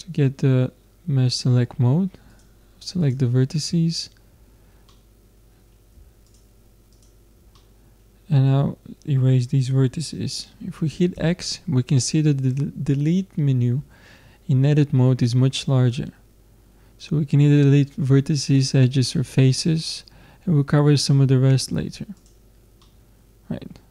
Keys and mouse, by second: 3.1-4.9 drag, 4.9-6.0 middle drag, 6.3 middle click, 6.7 click, 7.5-9.2 middle drag, 11.2 x, 22.8-23.9 middle drag.